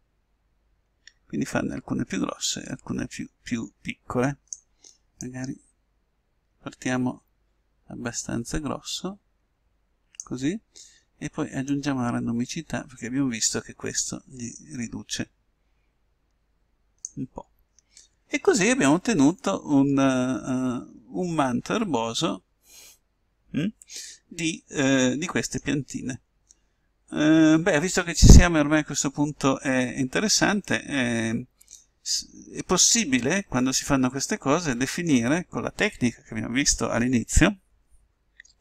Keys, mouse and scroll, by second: 6.3 click, 19.9-21.4 middle drag, 30.9 middle click.